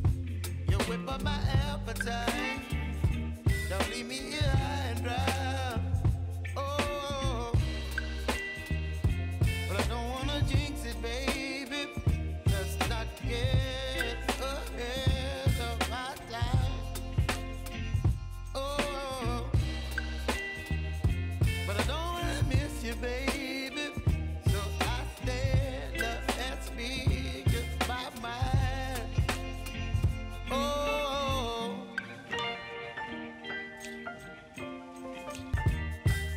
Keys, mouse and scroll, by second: 3.3 ctrl+alt+Home, 4.5 click, 4.8 u, 5.8 click, 6.3 ctrl+d, 6.8-10.1 drag, 10.1 ctrl+d, 10.5-14.8 drag, 15.3 ctrl+d, 16.1-18.1 drag, 18.1 s, 18.5-21.3 drag, 26.2 u, 28.6 click, 28.7 -, 29.5 ctrl+d, 30.1-36.3 drag.